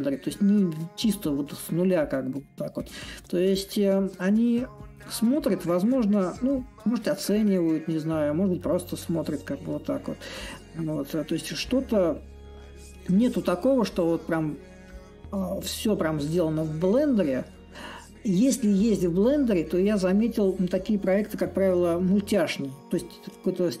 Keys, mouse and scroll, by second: 0.0-5.0 drag, 5.7-10.7 drag, 11.3-16.3 drag, 18.8-23.8 drag.